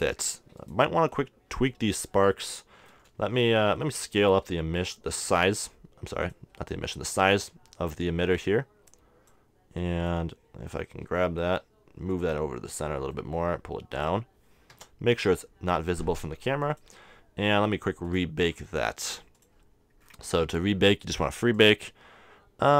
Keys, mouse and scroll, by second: 0.0-1.4 drag, 0.6-2.3 right drag, 2.2-3.3 middle drag, 4.8 s, 7.0-10.5 drag, 11.5 g, 13.2 click, 13.3 g, 14.1 click, 14.7 KP_0, 16.2 g.